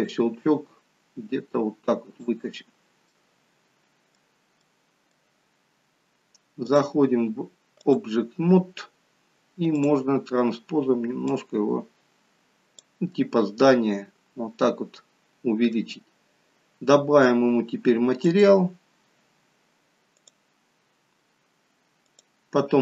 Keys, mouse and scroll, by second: 2.5-3.0 scroll down 3, 3.0 middle click, 4.6 middle click, 6.6 click, 11.5 click, 13.1 middle click, 18.3 click.